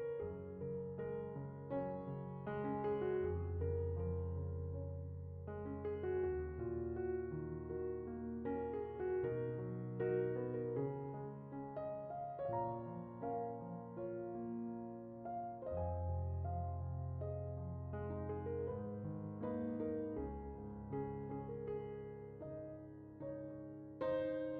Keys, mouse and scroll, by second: 0.3 middle click, 0.5 Tab, 0.7 click, 1.0 o, 1.2 g, 1.4 click, 1.9 click, 2.0 click, 2.1 g, 2.2 Tab, 2.3 scroll up 3, 2.7 z, 4.5 click, 4.8 g, 5.6 Tab, 5.8 g, 6.4 Tab, 7.1 click, 7.2 Tab, 7.4 scroll down 4, 7.5 middle click, 8.1-8.4 middle drag, 8.6 scroll up 3, 8.6 Tab, 8.8 click, 9.0 g, 9.2 click, 9.2 Tab, 9.4 Tab, 9.6 click, 9.8 Tab, 9.9-10.2 scroll down 3, 10.2 scroll up 3, 10.4 Tab, 10.6 click, 10.8 g, 10.9 middle click, 11.2 Tab, 11.2 scroll, 11.3 middle drag, 12.2 scroll up 2, 12.3 middle click, 13.3 middle click, 13.7 middle click, 14.4 Tab, 14.5 middle click, 15.2 middle click, 16.9 Tab, 17.0-17.4 middle drag, 18.1 middle click, 18.3 Tab, 18.4 Tab, 18.8 Tab, 19.7 alt+click, 20.3 middle click, 20.9 alt+click, 21.1 middle click, 22.1 alt+s, 22.9 alt+s, 24.1 click, 24.2 middle click.